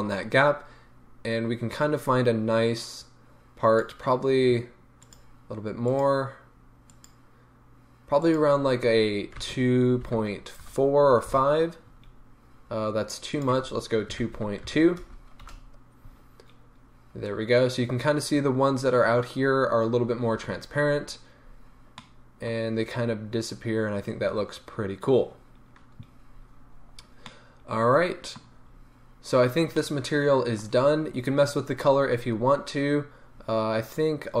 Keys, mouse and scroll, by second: 8.2-22.0 drag, 11.4 Return, 15.6 Return, 20.5-21.4 scroll down 1, 21.4 scroll up 1, 22.0-28.5 middle drag, 25.8-26.3 scroll down 2, 26.3-27.1 scroll up 2, 27.1 scroll up 1, 28.7-29.8 scroll down 2, 29.8-34.4 middle drag, 30.7 scroll down 2, 30.8-32.4 scroll up 2, 32.4-34.4 scroll up 1.